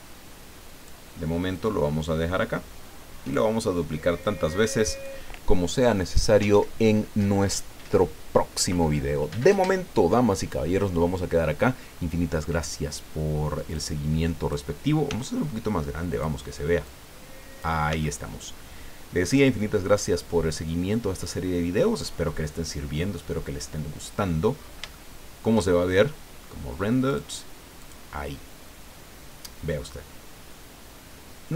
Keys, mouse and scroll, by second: 1.5-3.5 drag, 4.2-5.2 drag, 13.7 click, 15.1 s, 16.1 click, 16.8 click, 17.9 s, 19.3 click, 19.9 scroll down 2, 20.1-24.5 drag, 24.5-24.8 scroll up 2, 24.9 shift+click, 27.1 click, 27.8 click.